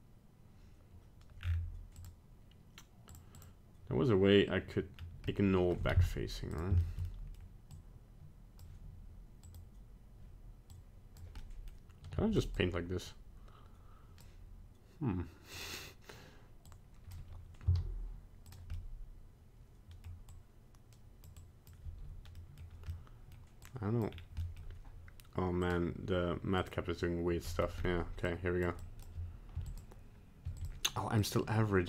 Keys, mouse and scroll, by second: 1.4 scroll down 5, 2.0 click, 3.7 click, 5.0 scroll down 1, 5.3 middle click, 6.0 z, 6.8 shift+middle click, 7.0 middle click, 7.1 middle click, 7.3 shift+middle click, 7.4 middle click, 7.5 shift+middle click, 7.7 click, 9.5 click, 11.4 middle click, 12.2 f, 12.5 click, 15.5 click, 17.7 z, 18.7 middle click, 20.3 click, 21.4 click, 22.4 middle click, 22.9 middle click, 23.6 click, 24.1 scroll down 2, 24.5 middle click, 25.6 click, 27.5 middle click, 27.8-28.8 scroll up 2, 28.3 click, 28.8 click, 29.6 f, 30.5 f, 31.2 click.